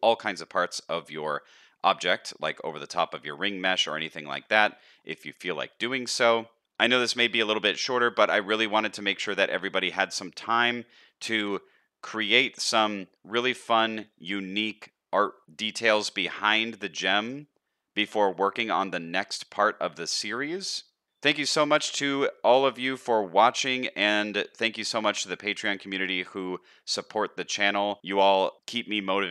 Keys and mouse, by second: 1.3 shift+middle click, 1.8 middle click, 3.2 shift+middle click, 3.7 middle drag, 4.2 shift+middle drag, 4.7 middle drag, 5.3 middle click, 6.4 middle click, 7.0 shift+middle click, 7.5-7.9 middle drag, 8.3-9.1 middle drag, 9.5-10.2 middle drag, 13.5-13.9 middle drag, 14.2-14.6 middle drag, 15.3-15.8 middle drag, 16.2-16.5 middle drag, 18.0-18.6 middle drag, 19.0-19.4 middle drag, 19.6-20.0 middle drag, 21.4-22.3 middle drag, 22.5-23.1 middle drag, 23.4-23.9 middle drag, 24.2-29.3 middle drag.